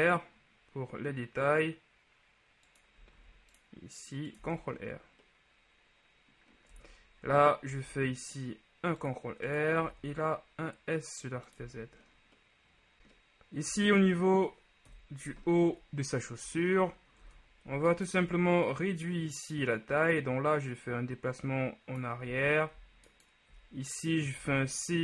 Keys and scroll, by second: 3.3 ctrl+r, 4.5 Tab, 7.8 ctrl+r, 10.0 s, 10.1 z, 11.7 Tab, 15.0 KP_3, 17.3 ctrl+Tab, 17.8 ctrl+alt+Tab, 22.5 z, 24.5 c.